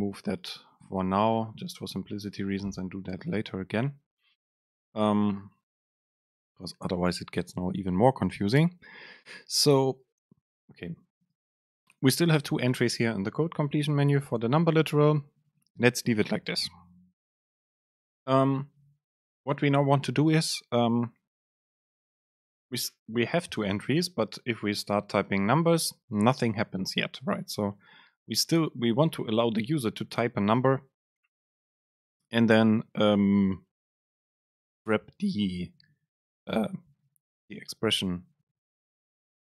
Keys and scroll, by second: 2.5 Delete, 11.6 super+space, 23.1 BackSpace, 39.1 super+space.